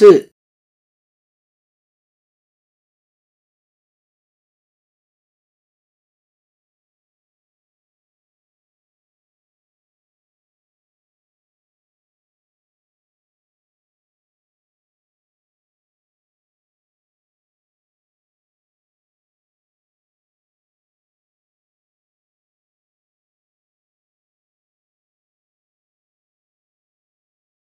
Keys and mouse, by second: 4.2-6.2 drag, 8.5 click, 13.9 ctrl+click, 17.5-19.6 drag, 20.3-20.9 middle drag, 21.6 middle click, 22.4 shift+middle click, 23.5 click, 27.5-27.7 right drag.